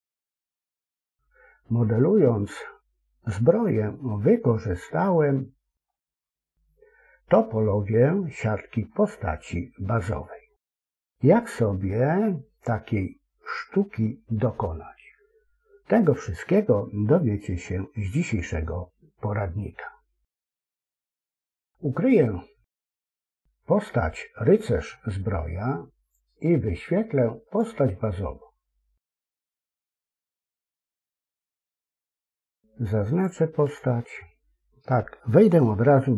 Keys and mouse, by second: 4.4-10.5 middle drag, 11.2 KP_1, 25.9 click, 27.4 click, 29.3 click, 32.2 Tab, 36.0 Tab.